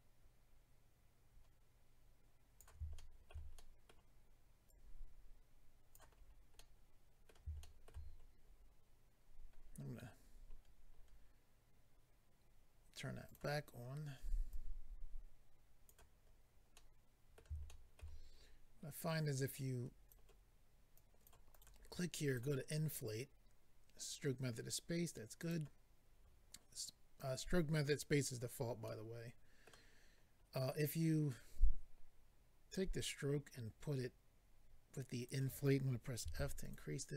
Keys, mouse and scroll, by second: 2.9 shift+middle click, 3.5 middle click, 4.6 click, 6.2-6.5 scroll down 3, 6.5 middle click, 7.6 shift+middle click, 7.8 middle click, 8.0-9.0 scroll up 3, 9.3 scroll up 1, 10.1-10.9 scroll down 5, 13.2 click, 13.3 click, 14.5 click, 16.2-16.7 scroll down 3, 16.7 middle click, 17.6 shift+middle click, 17.9 middle click, 19.0 click, 20.9 click, 21.5 click, 21.6 click, 22.3 click, 22.4 click, 25.4 click, 25.5 click, 28.8 middle click, 30.0-30.8 scroll up 3, 31.3 click, 36.2 f, 36.6 click, 36.7 click.